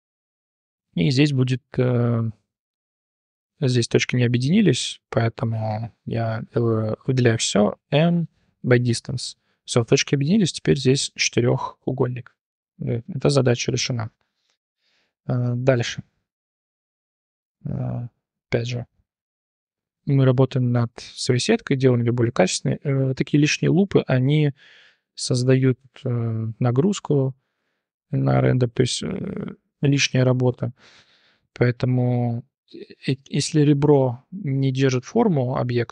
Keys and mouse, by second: 0.9 3, 5.5 a, 7.7 m, 9.1-9.9 drag, 9.9 3, 12.8 shift+click, 13.8 Tab, 14.1 shift+click, 14.8 click, 14.9 Tab, 15.3 1, 16.2 click, 17.3 2, 17.6 alt+click, 17.9 click, 18.7 click, 19.1 t, 19.7 t, 20.1 click, 20.6 click, 22.7 2, 23.0 alt+click, 23.2 click, 24.2 click, 24.8 click, 25.6 click, 27.8 alt+click, 28.1 click, 28.6 t, 29.2 t, 29.5 click, 30.2 click, 33.1 2, 33.5 alt+click, 33.7 click, 34.3 click.